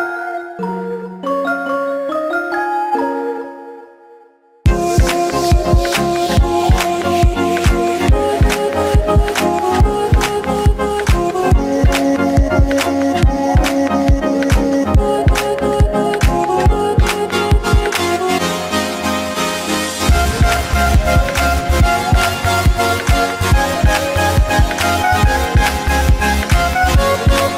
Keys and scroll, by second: 0.7 ctrl+alt+z, 4.7 ctrl+alt+z, 18.5 ctrl+alt+z, 21.3 ctrl+alt+z.